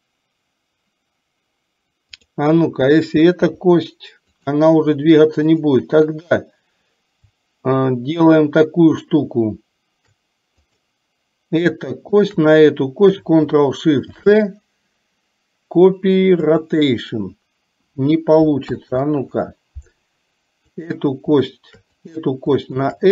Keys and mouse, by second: 2.4 click, 3.5 r, 10.8 click, 12.1 shift+click, 16.8 ctrl+shift+c, 18.8 ctrl+z, 20.8 click, 22.1 click.